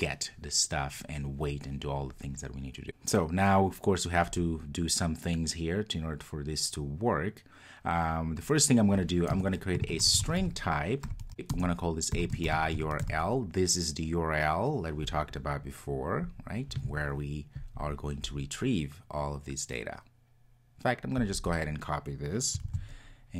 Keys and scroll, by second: 11.3 Return.